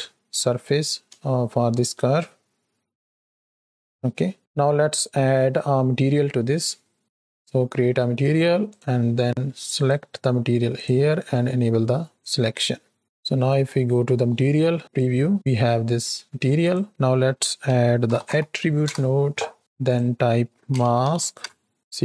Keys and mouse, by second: 1.6 shift+middle click, 4.4 space, 9.8-11.6 drag, 13.2 z, 16.2 shift+a, 18.0 t, 19.7-21.3 drag.